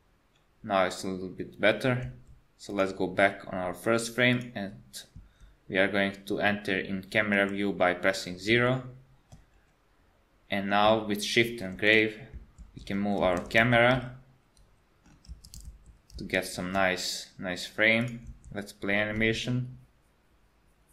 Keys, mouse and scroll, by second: 2.1 space, 2.7 click, 4.3 click, 7.4 KP_0, 8.7 shift+middle click, 9.5-10.3 scroll up 1, 10.3-10.9 scroll up 1, 11.5 shift+`, 18.3 space.